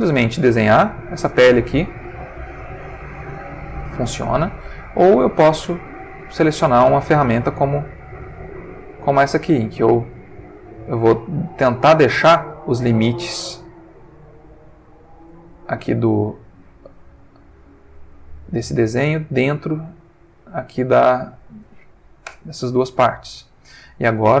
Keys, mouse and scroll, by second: 0.9-3.2 drag, 4.1 ctrl+z, 5.4 click, 6.4-12.5 drag, 13.2-15.5 drag, 16.5-17.7 drag, 18.6-21.0 drag, 22.2 Return, 23.1 ctrl+middle click.